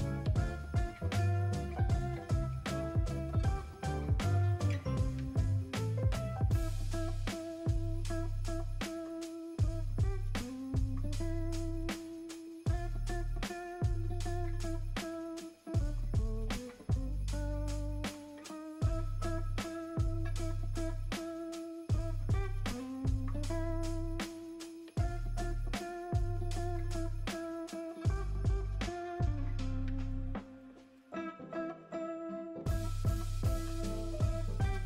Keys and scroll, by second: 0.7 /, 1.5 ], 2.3 space, 11.1 Escape, 15.1 space, 15.3 space, 15.6 ], 23.3 space, 24.1 space, 29.3 space, 29.5 space.